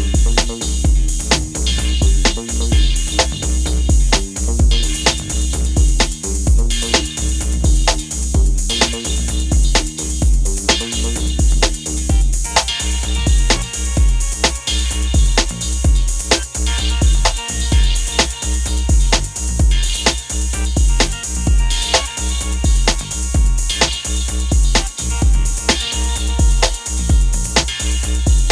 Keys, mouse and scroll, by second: 0.7-2.3 drag, 2.3-4.0 alt+scroll down 3, 5.3 alt+scroll up 1, 5.8-6.3 click, 6.2 space, 6.6-8.2 drag, 8.5-10.2 alt+scroll down 1, 11.1-12.3 alt+scroll up 1, 13.9 click, 16.2 click, 17.1 alt+scroll up 1, 19.3 p, 21.5 click, 22.8 p, 25.0-26.5 drag.